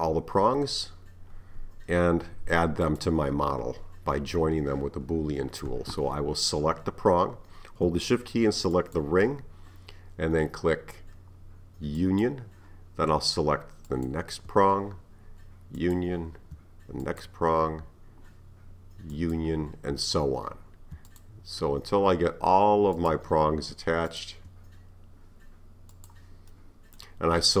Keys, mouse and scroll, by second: 0.1-2.4 scroll down 1, 2.4-2.9 scroll down 1, 2.9 click, 8.8 shift+click, 12.0 click, 13.9 shift+click, 15.8 click, 17.0 shift+click, 19.1 click, 21.1 shift+click, 23.0 click, 24.1 shift+click, 25.9 drag, 26.5-27.6 middle drag.